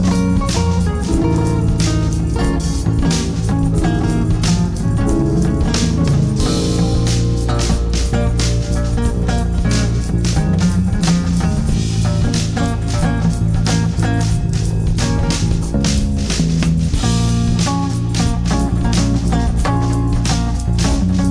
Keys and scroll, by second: 0.8 shift+F2, 2.6 g, 12.4 space, 12.7 F3, 15.1 F3, 16.5 F2, 17.7 ctrl+r.